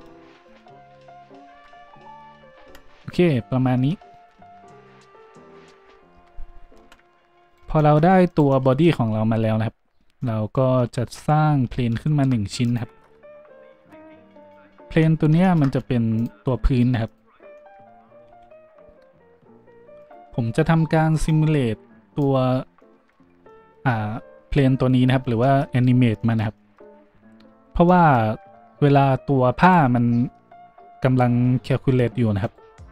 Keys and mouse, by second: 1.5 Tab, 2.6 Tab, 2.6 `, 5.8 Tab, 6.2 Tab, 6.8 Delete, 7.5 click, 8.3 click, 11.8 shift+a, 13.5 s, 21.3-29.6 drag, 29.6 middle click, 29.7-32.9 drag, 32.4 middle click, 32.4 right click.